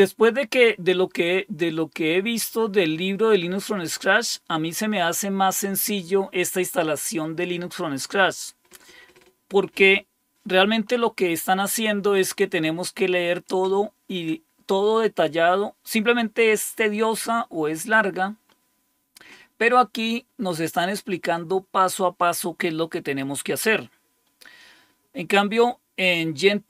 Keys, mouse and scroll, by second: 10.9-13.3 scroll up 4, 14.0 scroll up 2, 14.7-15.1 scroll up 2, 18.4-20.7 scroll up 4.